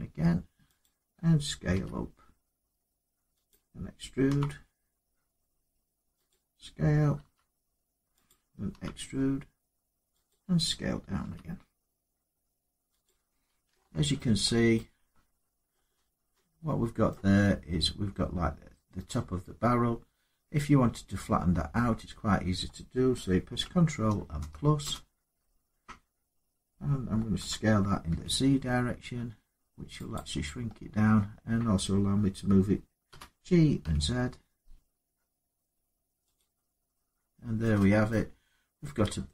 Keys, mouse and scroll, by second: 0.6 click, 1.5 s, 3.3 click, 4.1 e, 6.1 click, 7.0 s, 8.0 click, 8.5 e, 10.1 click, 11.0 s, 12.8 click, 13.9 middle click, 14.2 scroll, 14.4 scroll down 4, 14.9 scroll up 4, 15.5 middle click, 15.7-16.1 scroll down 2, 16.9 middle click, 18.2 middle click, 18.3 middle click, 24.6 ctrl++, 29.9 click, 30.5 middle click, 30.5 middle click, 33.6 z, 36.1 click, 36.1-36.9 scroll up 2, 36.9-37.4 scroll down 4, 37.9 middle click, 38.1 Tab, 39.0 middle click.